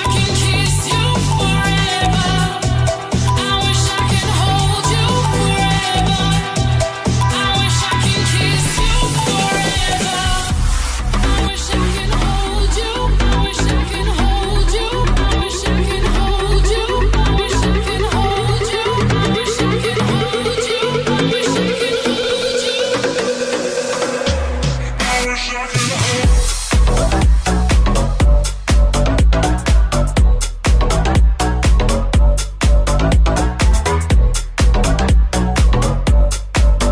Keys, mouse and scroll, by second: 1.0 right click, 1.0-2.5 middle drag, 1.6 ctrl+z, 2.7 alt+z, 3.7 shift+d, 4.8 p, 5.6 middle click, 5.8 Tab, 6.0 right click, 6.0-10.8 middle drag, 10.8-31.8 ctrl+drag, 10.8 Tab, 11.5 ctrl+a, 20.0 Tab, 21.3 alt+z, 22.8 alt+middle click, 22.8 alt+right click, 23.6 alt+z, 32.4-36.9 middle drag.